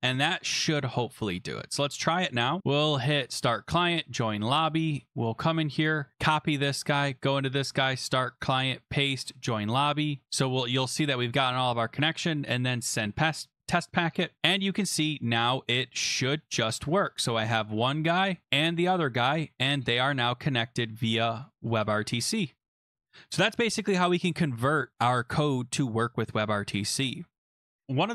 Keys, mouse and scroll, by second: 0.9 click, 1.3 ', 1.6 click, 2.1 click, 2.4 click, 3.3 click, 3.9 click, 4.6 click, 5.7 click, 5.8 click, 6.1 ctrl+c, 6.8 click, 7.8 click, 8.3 click, 8.5 ctrl+v, 9.3 click, 12.9 click, 14.4 click, 14.6 click, 16.5 click, 17.7 click, 18.4 click, 19.2 click, 20.2 click, 20.4 click, 20.7 click, 21.2 click, 21.4 click, 21.5 click, 21.7 click, 22.1 click, 22.3 click, 27.8 click, 27.8-28.1 scroll.